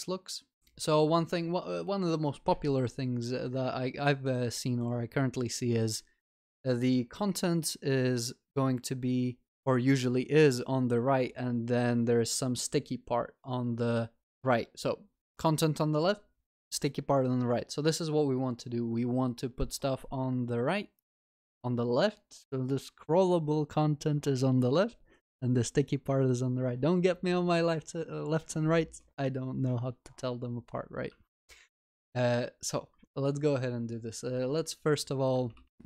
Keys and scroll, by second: 35.7 alt+shift+Down.